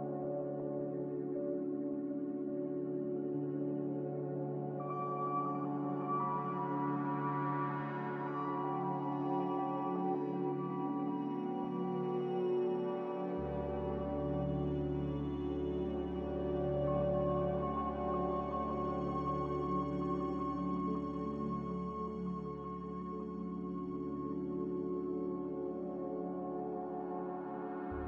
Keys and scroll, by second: 0.6-1.4 typing, 4.2 z, 6.8 Return, 13.5 5, 13.7 Return, 16.6-17.3 typing.